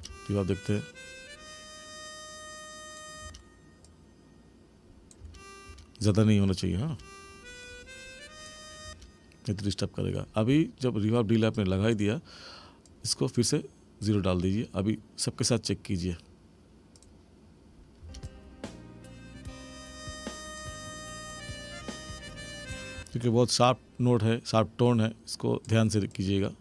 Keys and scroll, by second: 3.2 space, 5.2 space, 6.9 space, 8.8 space, 18.0 space, 22.9 space.